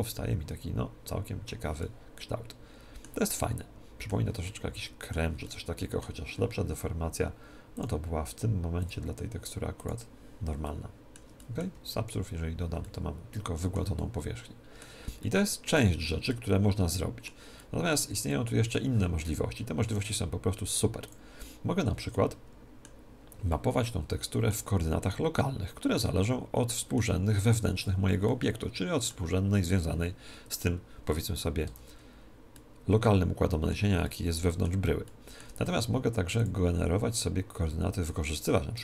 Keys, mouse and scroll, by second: 2.0-7.4 middle drag, 7.8-10.6 drag, 10.6-20.2 middle drag, 12.2 ctrl+2, 21.0-22.9 drag, 22.9-27.7 middle drag, 27.7 Tab, 28.2-30.2 middle drag, 31.6 Tab, 32.4-36.7 middle drag, 36.3-38.2 drag.